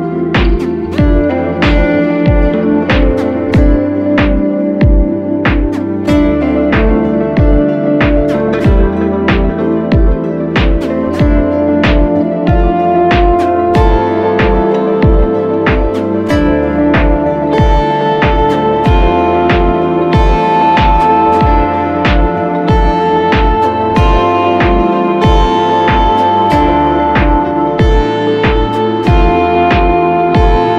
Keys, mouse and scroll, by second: 3.0 right click, 4.7 double click.